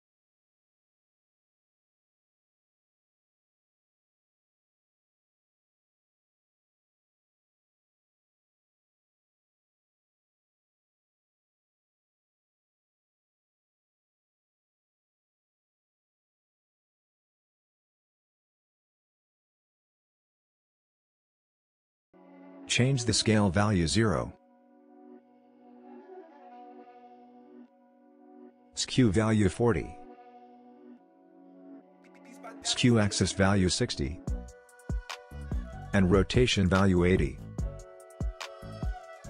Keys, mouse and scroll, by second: 3.0 click, 6.3 click, 10.1 click, 18.2-20.0 drag, 23.8 Return, 28.4 click, 31.0 Return, 31.8 click, 33.9 Return, 35.5 click, 37.4 Return, 38.6 click.